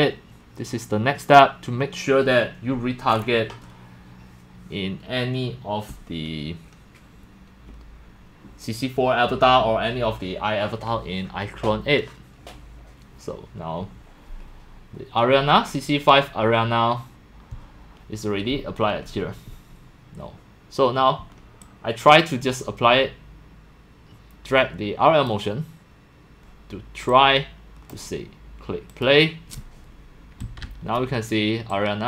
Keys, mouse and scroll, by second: 0.0-32.0 typing, 15.7 click, 21.6-25.3 drag, 27.1-27.9 drag, 28.0 click, 28.4 click, 28.9 click, 30.4 click, 31.7 click.